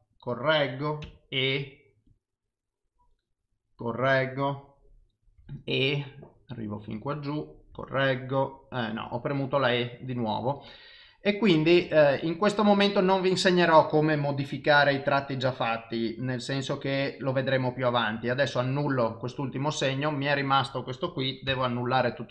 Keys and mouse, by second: 21.5 ctrl+z.